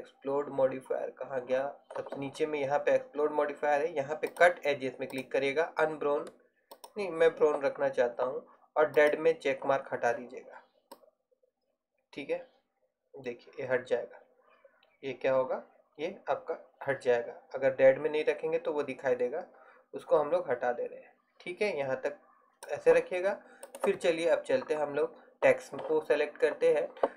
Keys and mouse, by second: 4.6-8.8 drag, 8.8 middle click, 9.3-10.9 drag, 11.2-13.0 drag, 23.8-25.7 right drag, 25.7-26.9 middle drag.